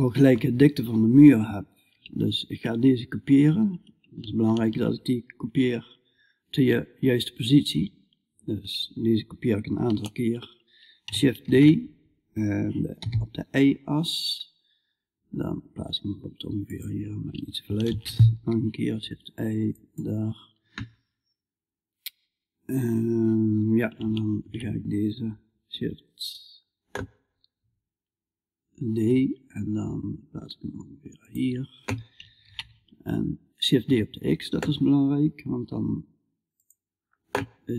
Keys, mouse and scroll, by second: 10.9 shift+d, 17.3 shift+d, 23.9 shift+d, 31.9 shift+d.